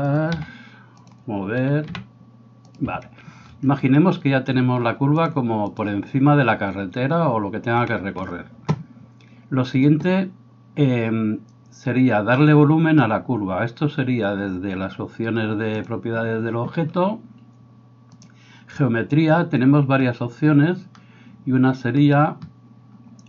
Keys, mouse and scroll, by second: 0.3 s, 2.0 g, 5.2-15.9 drag, 15.9-23.2 middle drag, 18.2-23.2 drag.